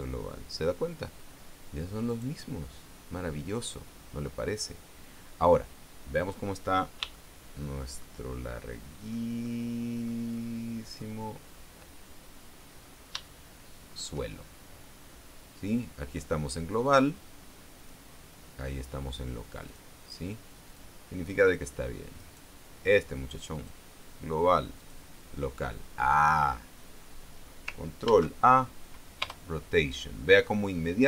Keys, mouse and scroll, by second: 0.1 click, 2.6 right click, 6.2-6.6 scroll down 1, 7.7-8.7 shift+middle drag, 8.9 shift+middle click, 10.0 shift+middle click, 10.9 shift+middle click, 13.0-13.3 scroll down 2, 13.8 shift+middle click, 17.4 click, 18.3 click, 20.2 click, 21.2 click, 22.7 right click, 24.1 click, 25.3 click, 28.6 ctrl+a, 29.8 Return.